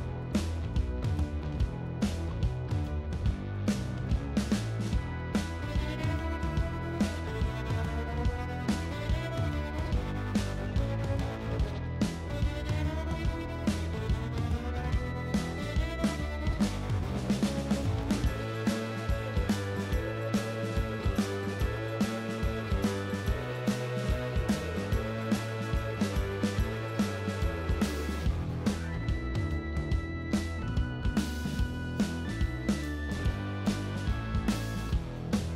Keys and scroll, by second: 1.5 d, 4.1 ctrl+z, 6.0 s, 22.3-24.5 typing, 25.5 shift+s, 28.0 shift+s, 31.4 shift+d, 32.4 shift+d.